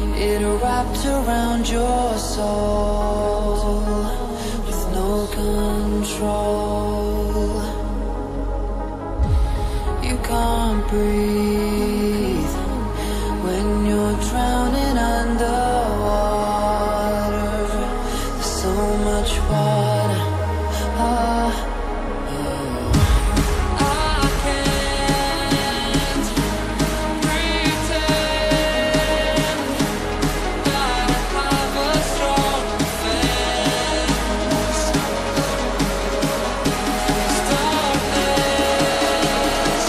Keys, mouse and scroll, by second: 5.6 click, 17.2 double click, 17.8 click, 28.1 scroll down 1, 28.4 scroll up 1, 28.9 shift+click, 39.3 double click.